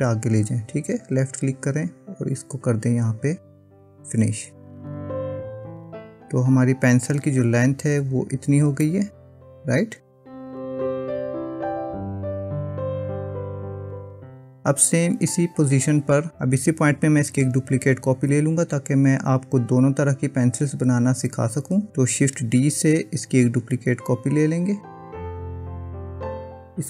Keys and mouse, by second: 2.2 click, 6.4 Tab, 8.9-12.9 middle drag, 24.0 shift+d.